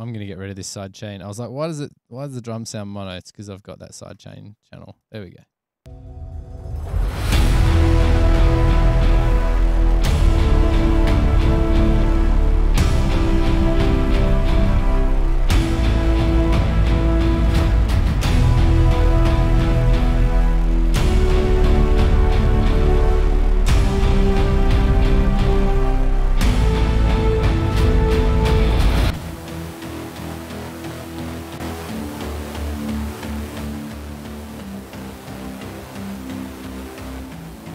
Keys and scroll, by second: 6.0 space.